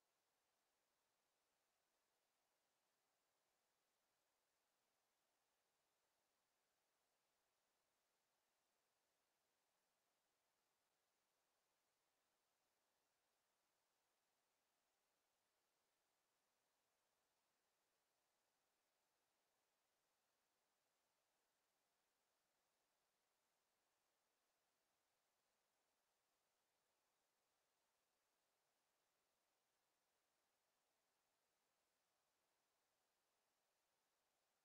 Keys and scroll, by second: 2.4 f.